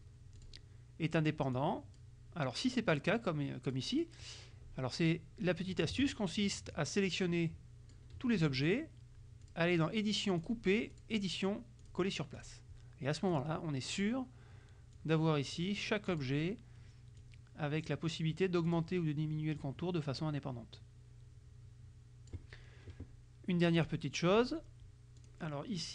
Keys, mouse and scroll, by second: 0.5 click, 1.6 click, 2.8-4.0 drag, 5.8 click, 6.9-8.2 drag, 9.5 click, 10.5 click, 11.0 click, 11.9 click, 12.4 click, 13.4 click, 14.0 click, 15.0 click, 16.2 click, 17.3 click, 18.8 click, 19.7-22.5 drag, 23.9 click, 25.3 click.